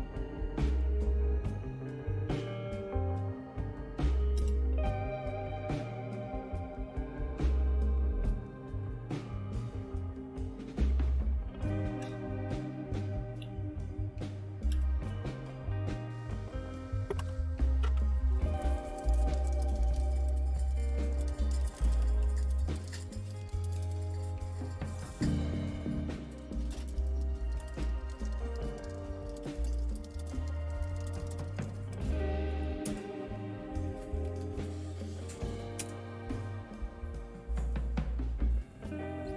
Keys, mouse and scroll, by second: 14.7 Return, 18.8-35.0 typing, 35.8 Return, 37.6-38.3 typing, 38.6 click, 39.1 click, 39.3 click.